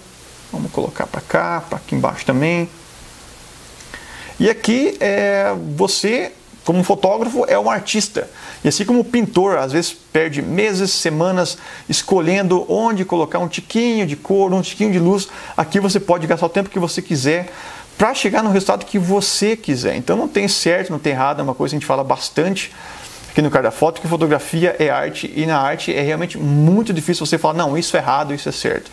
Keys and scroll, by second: 4.8 space, 10.4 [, 24.8 space.